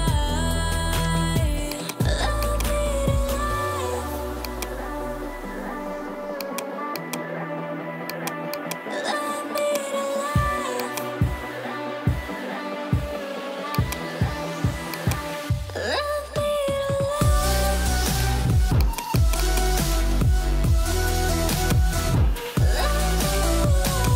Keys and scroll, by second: 11.9 alt+BackSpace, 19.5 p, 23.1 [.